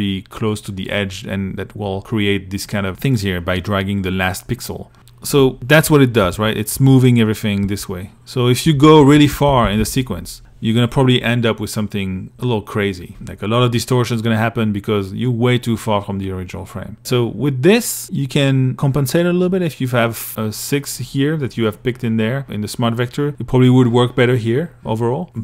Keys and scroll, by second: 5.5 shift+Right, 24.6 i.